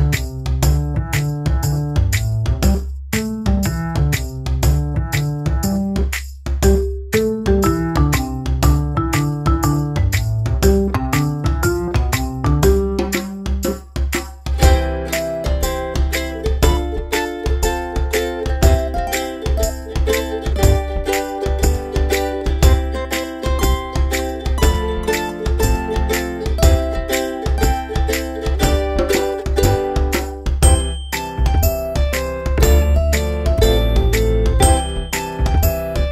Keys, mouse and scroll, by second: 0.0 click, 1.2 click, 2.0 z, 2.5 click, 19.7-21.2 typing, 22.7-23.2 alt+scroll up 2, 23.9 click, 24.5 space, 24.9 click, 29.7-30.9 scroll down 1, 30.9 click, 31.2-33.5 scroll down 1.